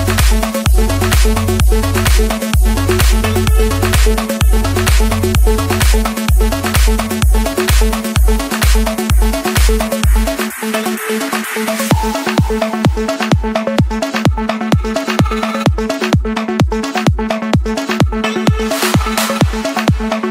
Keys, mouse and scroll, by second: 1.5-2.6 drag, 3.0-3.8 typing, 3.9 Return, 4.5 Escape, 5.4 scroll up 1, 7.0-7.5 typing, 8.5 Return, 9.6 click, 10.0 Return, 11.1 click, 11.5 Return, 12.8 Escape, 14.2-15.3 drag, 17.7 click, 19.6 Escape, 19.6 click.